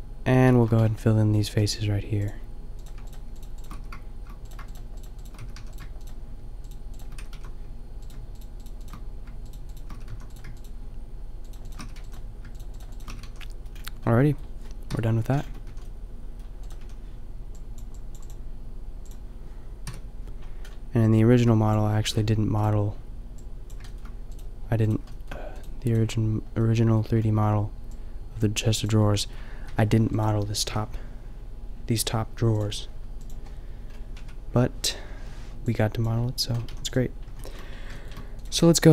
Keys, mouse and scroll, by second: 2.3 click, 3.8 f, 5.4 f, 5.5 a, 7.2 f, 7.4 a, 10.0 f, 10.1 a, 11.9 f, 12.0 a, 13.2 f, 13.3 a, 13.7-14.9 middle drag, 14.9 KP_5, 15.5 Tab, 15.7 a, 16.6-17.6 drag, 16.8 a, 19.9 KP_5, 23.8-27.9 middle drag, 28.0-28.9 drag, 29.6 Tab, 30.7 a, 33.2 a, 34.3 Tab, 36.7 a, 37.3-38.6 middle drag, 38.6 Tab.